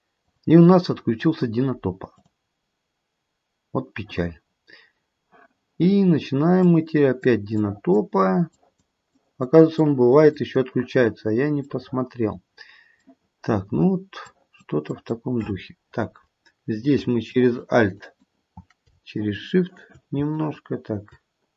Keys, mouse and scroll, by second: 0.1 click, 6.6 click, 7.6 click, 8.5 click, 9.1 click, 9.8 click, 10.3 click, 11.1-11.6 scroll down 2, 11.6 middle click, 14.3 click, 14.9 click, 17.2 alt+click, 17.9 alt+click, 19.1 shift+click, 19.8 shift+click, 20.4 alt+click.